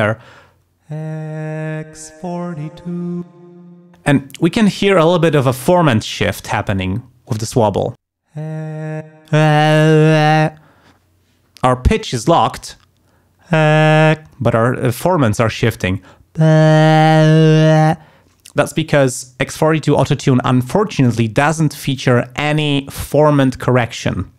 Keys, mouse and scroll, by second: 0.5 space, 3.3 space, 7.9 space, 9.1 space.